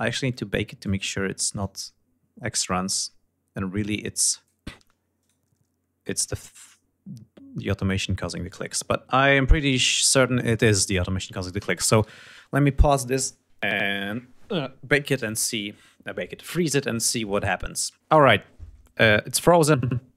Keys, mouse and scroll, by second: 1.1-4.2 drag, 4.7 shift+right click, 5.8 shift+click, 7.2 shift+click, 9.6 g, 19.4-20.1 scroll up 4.